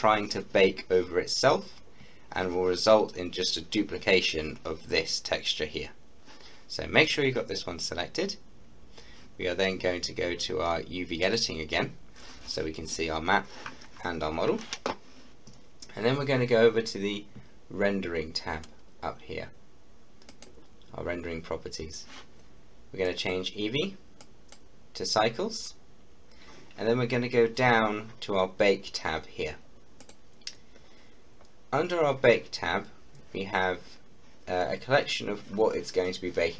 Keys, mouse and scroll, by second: 7.1 click, 11.3 click, 20.3 click, 23.1-26.8 drag, 30.0 click, 31.0-33.3 scroll down 1.